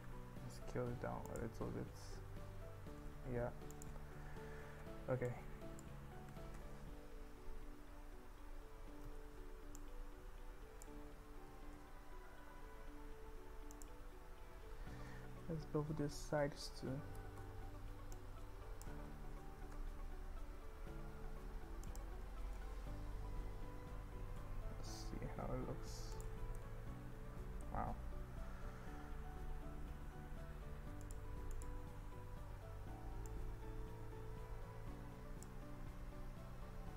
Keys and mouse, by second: 0.1 s, 1.4 click, 3.0 s, 3.8 click, 5.4 click, 6.3 g, 7.6 z, 9.2 click, 9.8-11.0 drag, 11.5 g, 11.8 z, 13.8 click, 15.0 ctrl+b, 17.4 click, 18.3 click, 19.7 ctrl+b, 22.0 click, 22.6 Tab, 24.5 Tab, 26.1 Tab, 26.1 click, 26.6-27.6 middle drag, 28.5 Tab, 29.2 KP_1, 31.6 click, 33.3-35.5 drag, 36.6 s.